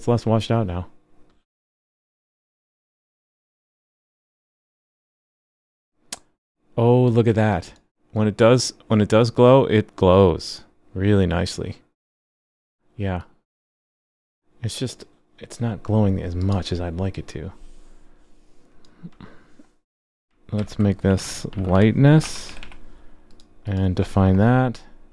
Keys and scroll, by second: 20.6 super+x.